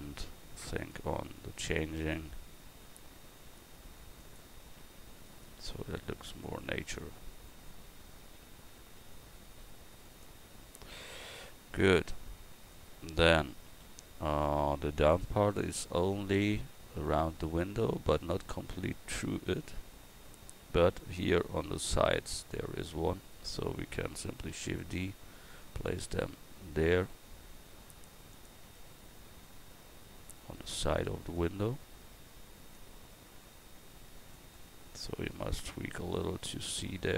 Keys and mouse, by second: 0.3 Tab, 1.8 right click, 2.6 g, 4.9 Tab, 5.3 right click, 5.7 Tab, 6.1-8.4 right drag, 8.4 g, 10.5 Tab, 13.7 a, 23.3-27.7 drag, 24.5 shift+d, 30.7-31.9 drag.